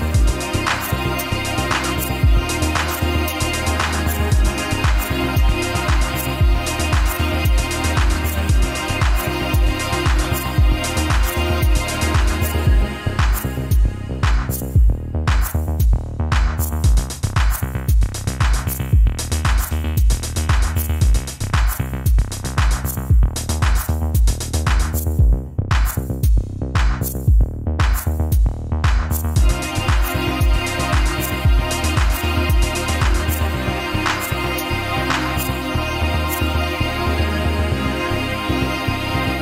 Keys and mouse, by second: 0.9-1.6 middle drag, 3.7-5.1 middle drag, 5.2 Tab, 7.4 ctrl+r, 13.2 ctrl+r, 16.5-17.6 middle drag, 18.7 middle click, 19.5 shift+middle click, 21.0 ctrl+r, 26.1-27.2 middle drag, 27.9-29.8 middle drag, 30.1 shift+middle click, 31.2 shift+middle click, 32.1 middle click, 33.7 ctrl+r, 39.0 ctrl+r.